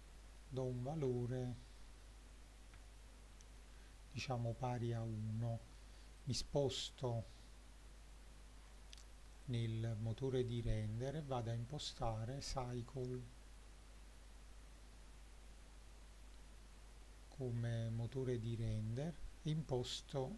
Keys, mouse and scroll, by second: 0.4 middle drag, 1.0-1.8 middle drag, 2.9-3.6 shift+middle drag, 6.2 click, 8.3-9.2 scroll up 4, 9.5-10.7 drag, 18.0-20.0 drag.